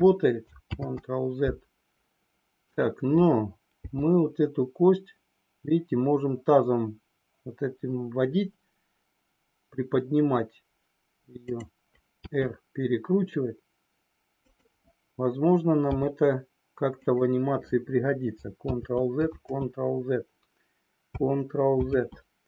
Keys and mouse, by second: 0.8 ctrl+z, 2.7 click, 11.4 click, 12.3 r, 17.0 click, 18.8 ctrl+z, 21.9 ctrl+z.